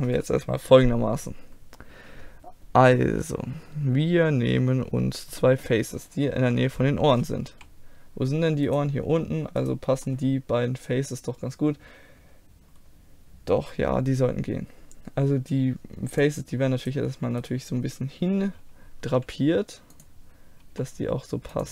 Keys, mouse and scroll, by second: 5.4 middle click, 6.4 KP_1, 7.5 z, 8.2 middle click, 8.7-11.5 right drag, 11.5-16.2 middle drag, 16.2-19.0 drag, 16.8-19.3 right drag, 19.1 g, 20.7 r.